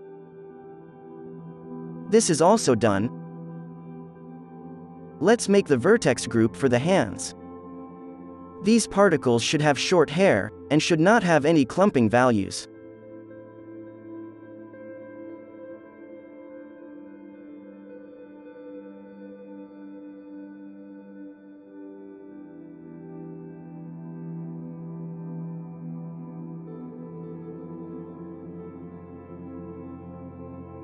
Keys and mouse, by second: 0.0 z, 0.4 click, 0.5 alt+a, 0.6 right click, 0.7 ctrl+s, 1.0 middle click, 2.5 click, 2.5 n, 3.2 d, 6.1 ctrl+z, 7.4 ctrl+z, 8.7 h, 10.3 ctrl+z, 10.3-12.9 drag, 10.7-12.5 middle drag, 10.7-12.5 right drag, 11.8 ctrl+l, 12.0 alt+h, 13.1-22.4 drag, 19.3 ctrl+v, 21.8-23.6 middle drag, 21.8 right click, 22.1 Tab, 23.4-28.3 drag, 23.4 right click, 24.5 middle click, 24.5 right click, 24.5 z, 27.4 middle click, 27.4 right click, 28.3 middle click, 28.5-30.7 drag, 28.5-30.7 right drag, 30.7-30.8 middle drag.